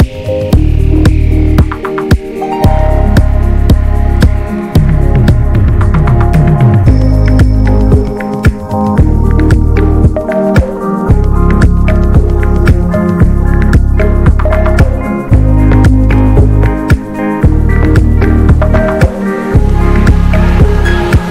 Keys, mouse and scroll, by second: 2.0 click, 2.4 scroll down 2, 2.7-3.9 middle drag, 4.3 scroll up 2, 4.9 shift+middle click, 5.1-7.0 scroll up 1, 7.0 f, 19.2 ctrl+click, 19.8-20.2 scroll down 2, 20.2 middle click, 20.5 scroll down 1, 20.7 middle click, 20.9-21.2 scroll up 1, 21.2 ctrl+z.